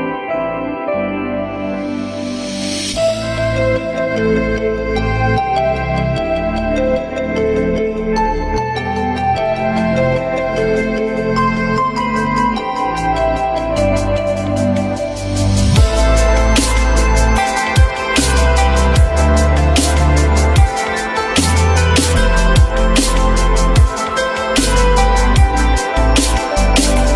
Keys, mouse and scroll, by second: 3.5 alt+middle click, 4.1 alt+middle click, 5.2 F3, 5.7 F3, 6.4 alt+middle click, 7.1 alt+middle click, 9.5 j, 10.4 alt+middle click, 11.4 alt+middle click, 11.7 alt+middle click, 12.6 alt+scroll up 1, 16.0 alt+middle click, 17.0 alt+middle click.